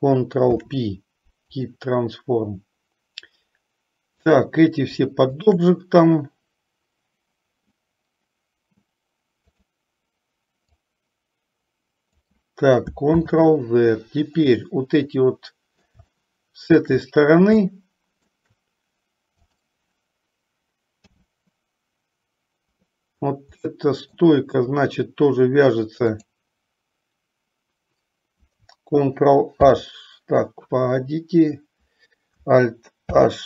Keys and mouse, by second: 0.7 ctrl+p, 5.5 shift+click, 9.7 click, 11.2-12.6 drag, 13.4 ctrl+z, 14.8-16.1 middle drag, 16.4-17.3 shift+middle drag, 18.0-18.7 shift+middle drag, 19.5 click, 21.3 h, 24.2-24.5 middle drag, 29.6 ctrl+h, 33.3 alt+h.